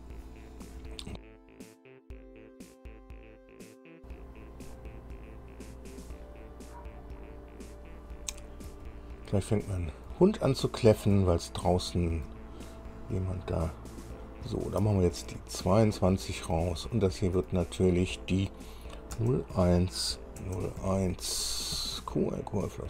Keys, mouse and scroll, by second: 1.0 BackSpace, 9.0 Left, 10.4 Right, 11.5 Right, 12.1 Left, 12.6 Right, 14.8 Left, 15.6 2, 16.0 Delete, 17.0 Delete, 17.2 Delete, 19.5 KP_0, 19.9 KP_1, 20.8 KP_0, 21.2 KP_1, 22.1 Right, 22.3 Right, 22.8 Right.